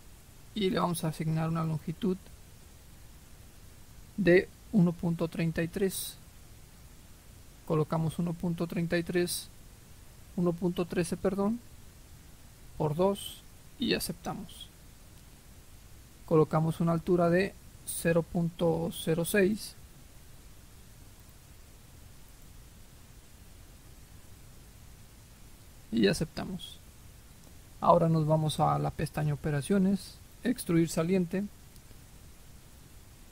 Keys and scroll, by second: 7.6-8.7 typing, 10.5-13.2 typing, 13.4 Return, 20.2 Escape, 23.5-25.4 typing, 25.5 Return.